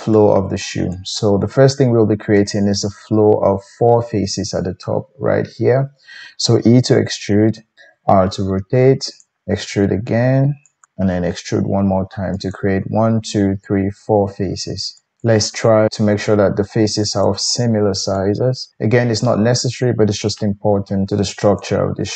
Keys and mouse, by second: 0.1-7.7 drag, 6.8 e, 7.7-14.9 middle drag, 7.9 r, 9.4 e, 10.8 r, 11.0 e, 14.9-17.2 drag, 15.9 g, 17.2 middle click, 18.2 click, 18.8-21.6 middle drag, 18.8 g, 21.1 g, 21.6 click.